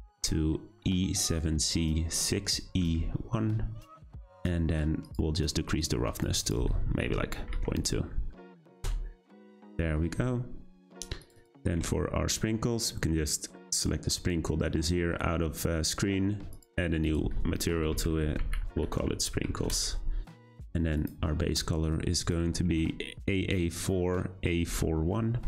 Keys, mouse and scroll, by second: 5.8-9.4 drag, 13.8 click, 16.6-20.0 drag, 20.9 click.